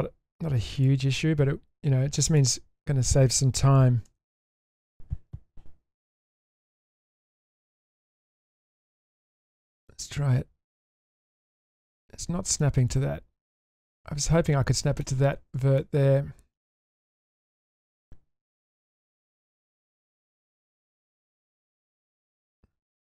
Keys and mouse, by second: 0.8 click, 4.1 g, 6.6 shift+middle click, 6.9 shift+middle click, 7.3 middle click, 7.8 shift+middle click, 8.9 shift+middle click, 9.9-11.6 drag, 12.6 shift+middle click, 13.6-15.0 drag, 15.4 ctrl+z, 15.8-16.5 middle drag, 17.1-18.5 drag, 20.3 click, 21.0 click.